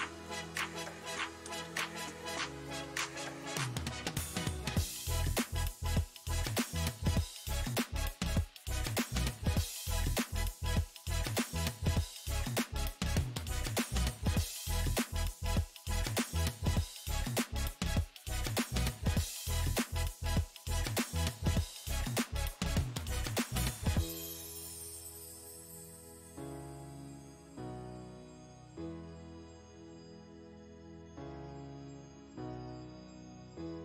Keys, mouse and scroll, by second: 3.3-5.1 middle drag, 5.1-7.7 drag, 8.1-11.4 middle drag, 11.4-14.1 drag, 14.1-15.6 middle drag, 15.6-18.3 drag, 19.5-21.5 middle drag, 21.5-24.2 drag, 24.8-25.9 middle drag, 25.9-27.8 drag, 27.8-29.1 middle drag, 29.1 click, 30.0-33.2 middle drag, 33.2 shift+c, 33.7 f.